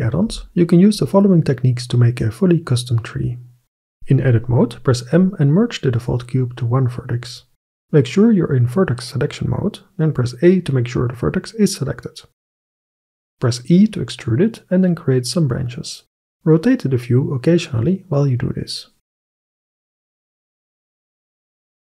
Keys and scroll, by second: 3.9 Tab, 5.0 m, 10.4 a, 13.6 e.